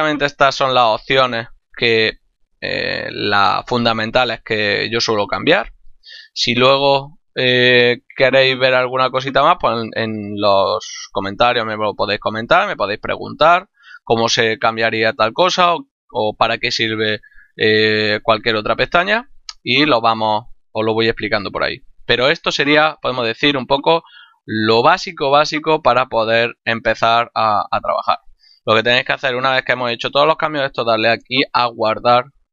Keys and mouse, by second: 0.1 middle click, 5.5 middle click, 8.7 middle click, 13.5 middle click, 15.0 middle click, 19.7 click, 21.8 middle click.